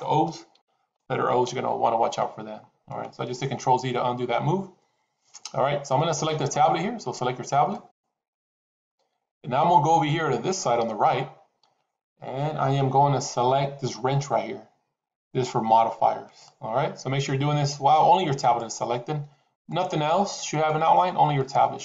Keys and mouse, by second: 0.4 ctrl+z, 1.4 KP_7, 2.8 shift+middle click, 7.6 click, 16.2 click, 18.3 click, 19.5 click, 21.3 click.